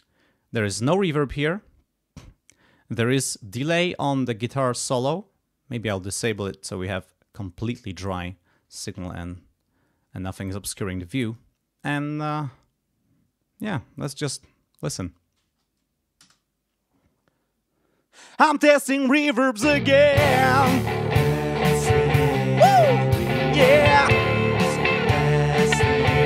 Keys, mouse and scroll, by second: 0.9 scroll up 2, 3.3 scroll down 2, 4.4 click, 6.3 click, 8.8 click, 10.1 scroll up 1, 11.2 click, 16.2 space, 20.3-21.5 scroll down 6.